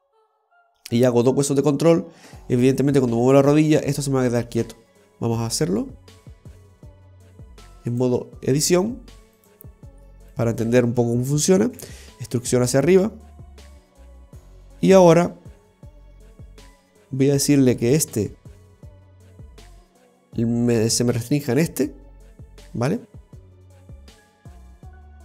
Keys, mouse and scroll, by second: 8.0 click, 9.5 right click, 10.4 shift+right click, 11.9 e, 14.5-14.9 scroll down 2, 14.9 middle click, 16.8 scroll up 6, 17.0 v, 18.1 right click, 19.7 middle click, 21.6-21.9 scroll down 3, 22.0 middle click, 24.4 click.